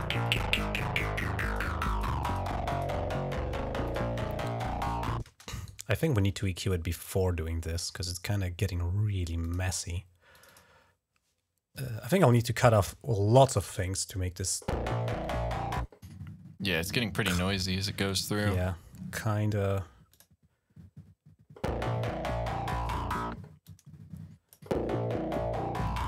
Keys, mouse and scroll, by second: 0.1-1.4 drag, 1.7 click, 2.1 click, 2.6 click, 3.7 click, 5.1 space, 5.4 right click, 9.3 click, 10.2 click, 10.3 click, 11.6 click, 12.5 click, 16.7 click, 17.8 click, 19.9 click, 20.2 click, 23.5 click, 25.2-26.0 drag.